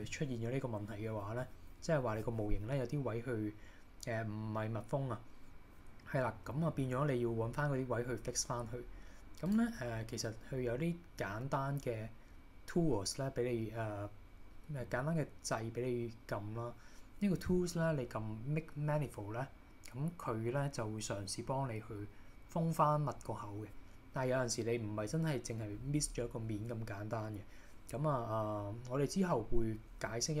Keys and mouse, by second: 9.5 click.